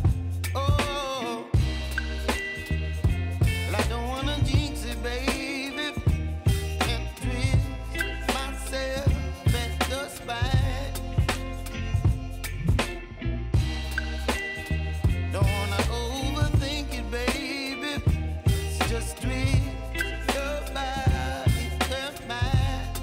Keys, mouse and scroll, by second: 0.2-16.0 drag, 16.0 u, 17.4-21.1 drag, 21.1 v, 21.8-23.0 drag.